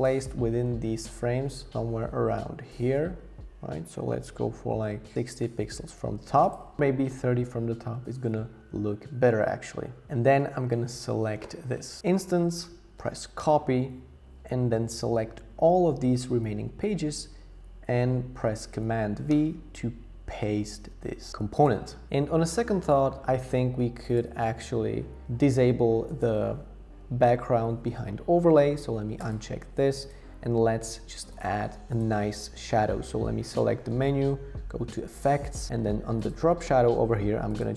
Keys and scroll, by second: 13.4 super+c, 19.3 super+v.